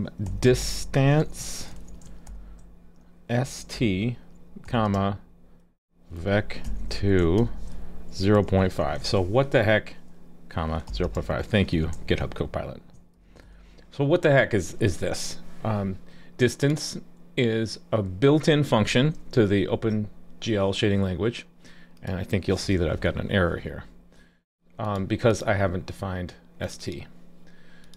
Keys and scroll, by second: 19.7 super+s, 22.7 alt+super+j.